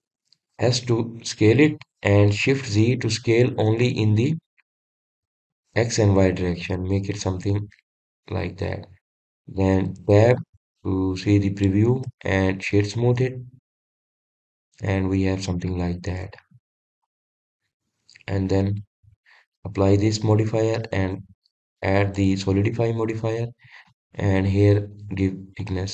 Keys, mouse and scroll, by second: 2.2 s, 9.6 shift+z, 9.9 click, 11.4 Tab, 12.0-13.6 middle drag, 13.6-15.0 right drag, 15.0 drag, 15.7-20.6 middle drag, 20.6-23.0 drag, 23.8-24.2 drag, 24.2-25.9 middle drag.